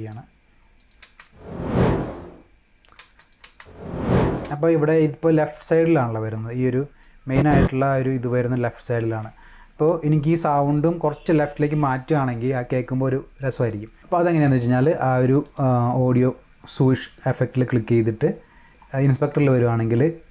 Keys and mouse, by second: 0.8 click, 3.2 click, 5.5 click, 7.0-7.9 drag, 10.6 click, 14.6 click, 15.3 click.